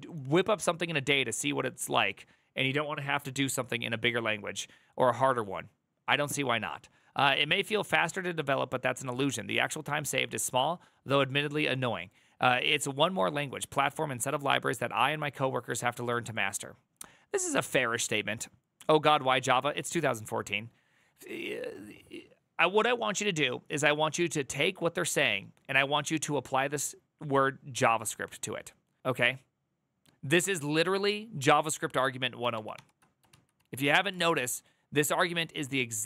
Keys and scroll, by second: 32.3 ctrl+l, 32.5 ctrl+c, 33.0 alt+[, 33.3 alt+{, 33.9 alt+[.